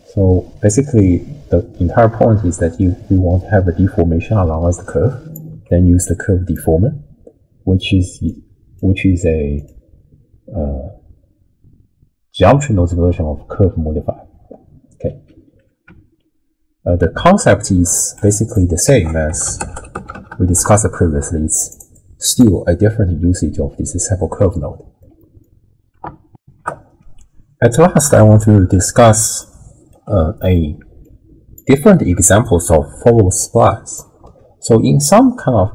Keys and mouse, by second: 6.0 click, 8.4 click, 9.7-14.5 drag, 18.2 middle click, 18.3 click, 18.5 middle click, 18.8 ctrl+a, 21.9 middle click, 25.0 middle click, 26.4 ctrl+alt+shift+w, 26.5 ctrl+alt+shift+q, 29.4 ctrl+click, 30.2 click, 31.2 click, 33.0 ctrl+x, 33.4-33.9 drag, 34.2 ctrl+x.